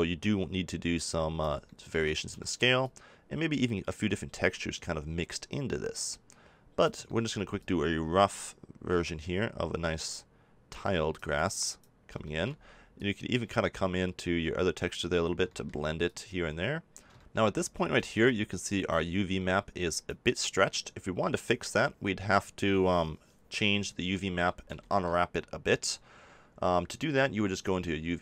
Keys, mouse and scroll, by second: 1.6-2.8 middle drag, 2.8-7.0 drag, 7.0 middle click, 7.5-9.4 drag, 17.5-18.6 drag, 18.6 middle click, 18.8-20.6 drag, 23.6 middle click, 24.3 middle click.